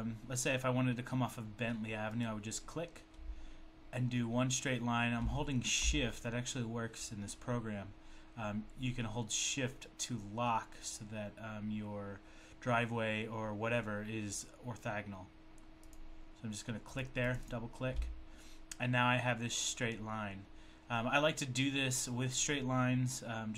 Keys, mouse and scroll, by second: 2.2 click, 15.8 shift+click, 16.8 shift+double click, 17.3 shift+double click, 17.4 shift+click, 17.5 shift+click.